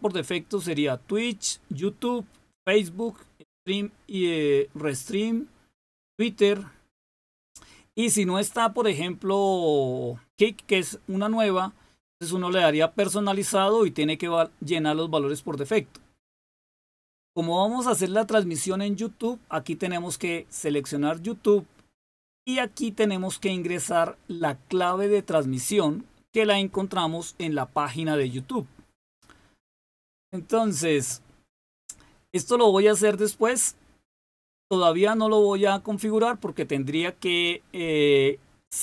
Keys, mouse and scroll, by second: 19.9 click, 22.9 click.